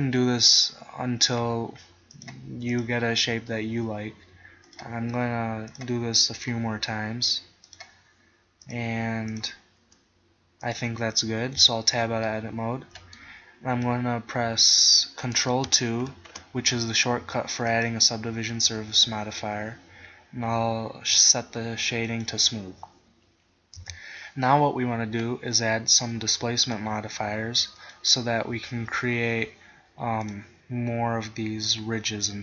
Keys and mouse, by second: 0.5 s, 3.5 s, 4.0 middle click, 7.0 s, 7.5 click, 8.4 click, 9.4 click, 9.8 s, 10.4 middle click, 10.8 click, 11.6 Tab, 12.3 click, 12.7 middle click, 16.1 ctrl+2, 17.8-19.5 drag, 22.1-24.1 drag, 23.8 KP_1, 24.1-26.6 middle drag, 26.7 click, 28.6 middle click.